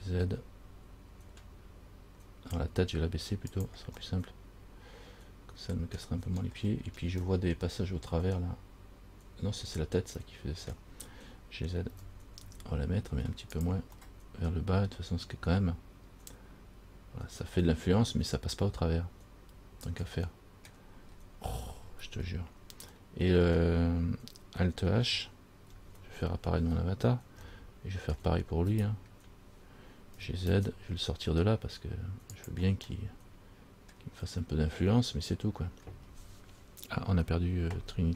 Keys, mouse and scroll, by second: 4.3 middle click, 6.4-7.4 scroll up 6, 7.5 middle click, 12.1 g, 14.2 middle click, 21.2-21.7 scroll down 4, 22.2-22.9 scroll down 6, 23.1 middle click, 25.9 alt+h, 27.7 shift+middle click, 28.4-28.9 shift+scroll down 1, 28.9 right click, 30.4 g, 33.1 middle click.